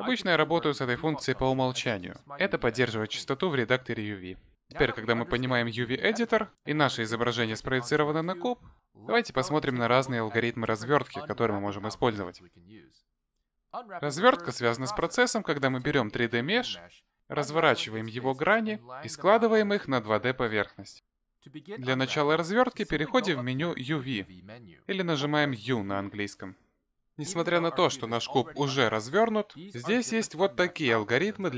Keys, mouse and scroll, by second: 0.0 click, 1.8 click, 25.3 click.